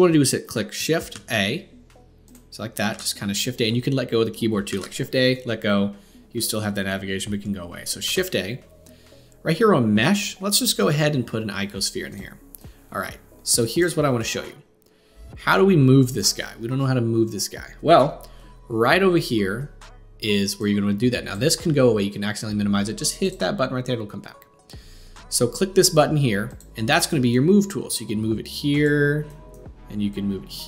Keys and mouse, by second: 0.0 click, 1.1 shift+a, 2.9 shift+a, 4.7 shift+a, 8.0 shift+a, 8.0-14.3 shift+drag, 14.3-20.6 middle drag, 20.6-30.6 drag.